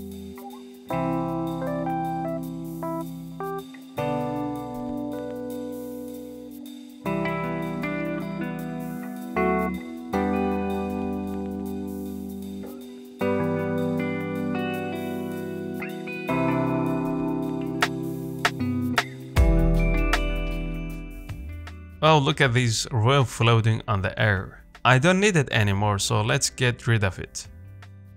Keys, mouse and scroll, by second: 0.3 click, 0.6 z, 0.8 click, 1.4 z, 1.9 click, 2.0 z, 2.9 g, 4.7 g, 6.0 g, 7.1 scroll down 4, 7.4 middle click, 7.9-8.2 scroll up 4, 8.2 Tab, 9.1 alt+click, 10.0 z, 10.5 click, 10.7 z, 11.1 g, 12.8 scroll down 1, 13.0 middle click, 13.4 scroll down 1, 13.6 middle click, 13.9 scroll down 1, 14.1 middle click, 14.5-15.4 scroll up 1, 15.4-15.9 scroll up 1, 15.9 scroll down 1, 16.0 middle click, 16.1-16.8 scroll up 2, 16.4 shift+middle click, 16.8-18.0 middle drag, 18.0 scroll down 1, 18.2 shift+middle click, 18.6 scroll down 1, 18.8 middle click, 19.6 click, 19.7 s, 20.4 scroll down 1, 20.5 middle click, 20.8 s, 21.7 scroll down 2, 21.9 shift+middle click, 22.6-22.9 scroll up 1, 22.9 middle click, 23.7 click, 23.9 scroll up 2, 24.1 shift+middle click, 25.1 Delete, 25.9 shift+middle click, 26.2-26.5 scroll up 1, 26.5 shift+middle click, 27.1-27.9 scroll up 2, 27.9 shift+middle click.